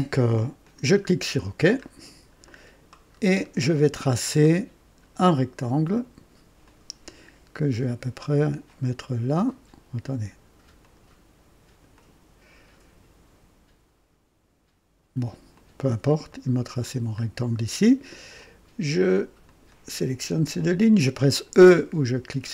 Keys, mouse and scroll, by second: 0.6 click, 1.8-2.2 scroll up 2, 2.4-3.0 right drag, 3.1 scroll up 2, 3.7-4.5 right drag, 6.6 click, 8.6-9.7 drag, 10.7 click, 11.9 click, 15.5 click, 16.3 right click, 16.9 scroll down 1, 18.3 click, 19.4 click, 22.4 e.